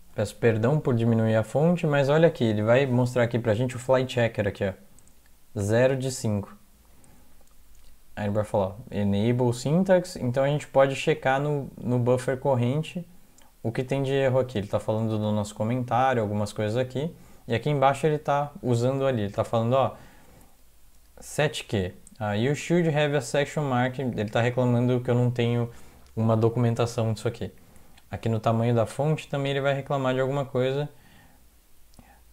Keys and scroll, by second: 0.4 super+Up, 20.0 Down, 26.5 Down, 26.7 Down, 26.9-28.1 Down.